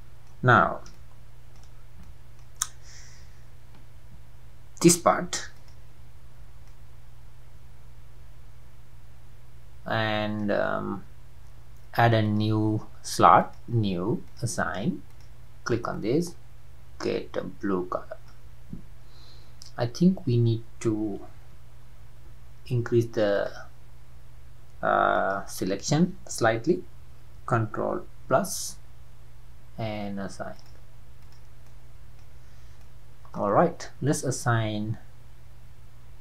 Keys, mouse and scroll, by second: 1.0 shift+middle click, 1.8 scroll up 2, 2.0-2.6 middle drag, 2.6-3.1 scroll up 1, 5.7 alt+click, 6.4 scroll down 2, 6.7-9.8 middle drag, 12.5-16.0 drag, 22.3 ctrl+KP_Add, 23.5 click, 28.3 ctrl+KP_Add, 30.8-31.4 drag, 31.6-32.5 middle drag, 32.5-32.9 scroll down 1, 32.9-36.2 middle drag.